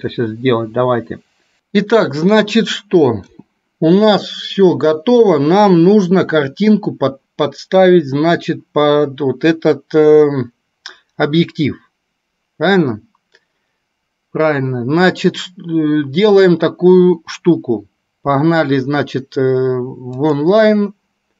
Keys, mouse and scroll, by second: 3.5 KP_0.